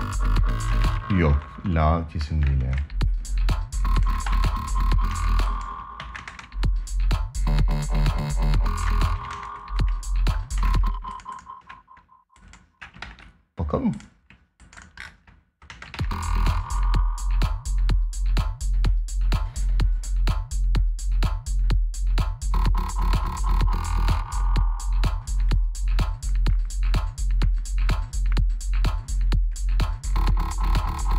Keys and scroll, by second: 0.4 space, 2.3 space, 4.0 ctrl+s, 4.8 space, 5.7 ctrl+Up, 8.6 space, 10.3 space, 12.8 ctrl+s, 15.4 space, 15.7 ctrl+s.